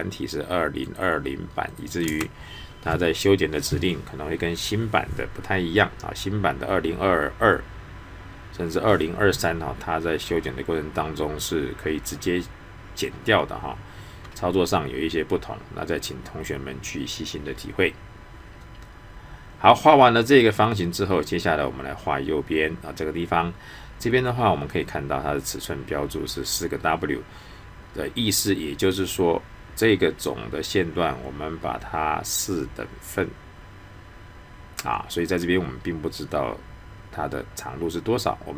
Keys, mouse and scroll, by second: 0.8 click, 2.0 space.